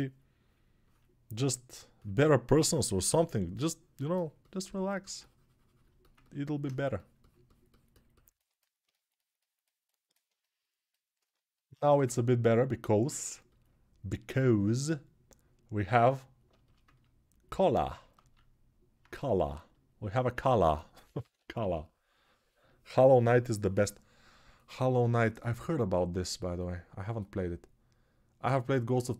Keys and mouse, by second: 2.8 s, 13.4-21.0 alt+right drag, 18.4 alt+q, 20.1 1, 21.0-29.1 drag.